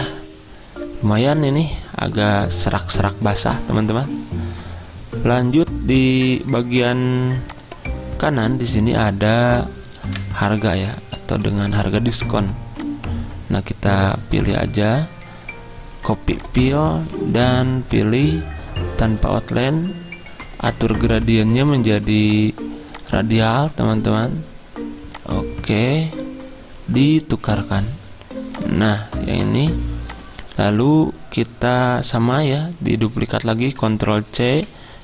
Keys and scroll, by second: 34.6 ctrl+c.